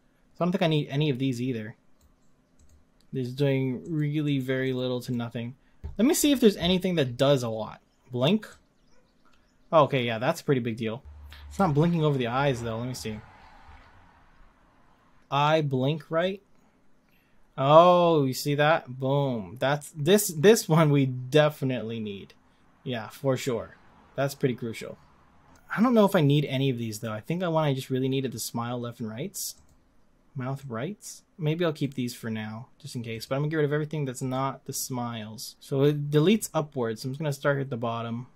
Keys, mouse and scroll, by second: 3.9-11.0 drag, 11.7 z, 13.7 scroll up 14, 14.0-15.3 scroll down 5, 15.7-16.5 scroll down 3, 16.5-19.4 drag, 25.8 click, 29.5 click, 30.6-33.2 drag, 34.3-36.3 drag.